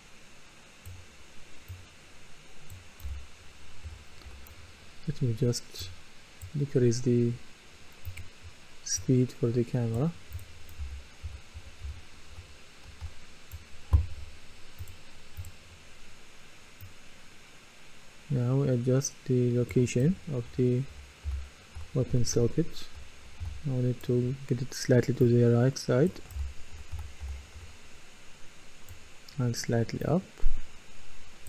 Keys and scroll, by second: 3.0-4.3 typing, 10.6-13.0 typing, 19.8-23.4 typing, 26.1-28.1 typing.